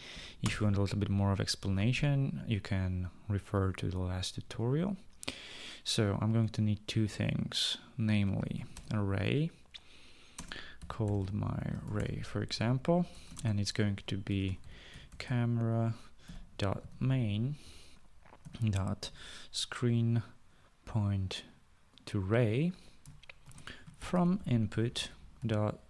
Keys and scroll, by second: 0.7 Return, 8.3-9.6 typing, 10.7-18.7 typing, 22.5-25.8 typing.